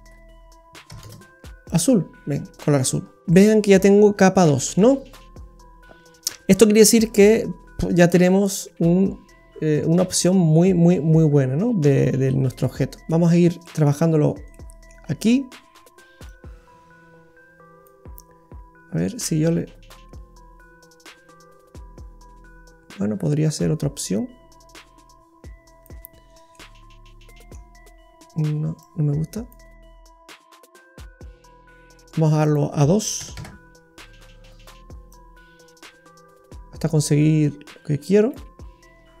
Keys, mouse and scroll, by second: 2.3-3.2 scroll down 8, 3.2 middle click, 3.2 scroll up 6, 3.5 middle click, 3.9-4.5 scroll up 4, 4.4 middle click, 6.5-7.3 scroll up 8, 8.1 click, 8.1 scroll up 1, 13.0 middle click, 13.0-13.7 scroll down 10, 13.6 middle click, 14.0-14.8 scroll up 9, 14.5 middle click, 15.0-15.5 scroll up 4, 16.2 click, 19.2 click, 26.3-26.7 scroll down 3, 26.5 middle click, 28.8 click, 30.5 click, 32.4 click, 35.1 click, 38.9-39.2 scroll down 2.